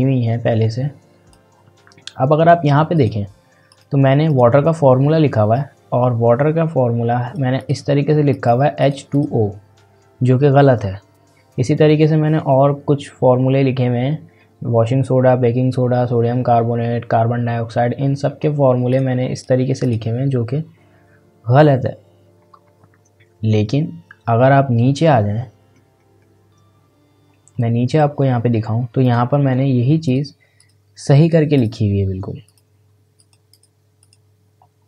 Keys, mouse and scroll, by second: 18.9 click, 23.6 scroll down 1, 27.2 scroll up 1, 27.5-29.0 scroll down 1, 29.0 click.